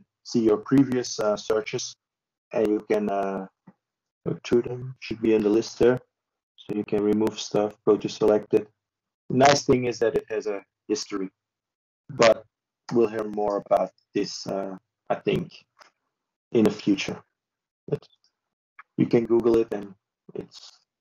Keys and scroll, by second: 18.2 ctrl+space.